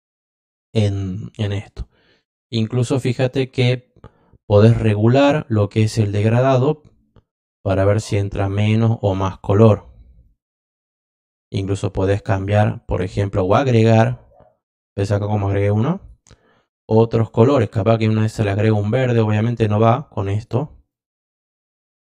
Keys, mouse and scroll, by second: 1.5 click, 4.7-5.3 drag, 5.7-6.2 drag, 7.4 drag, 8.6-9.1 drag, 10.2-10.7 drag, 13.4 click, 14.3 click, 15.7 click, 15.9 click, 17.7 click, 18.6-19.4 drag, 19.9 click, 20.9 click.